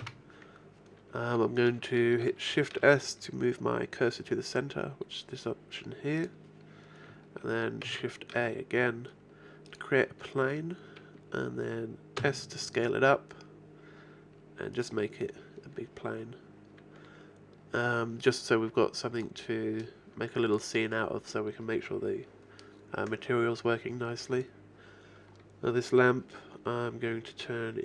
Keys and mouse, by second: 0.0 Escape, 2.5 shift+s, 7.9 shift+a, 12.2 s, 15.4-17.8 drag, 20.2 click, 20.5-22.4 right drag.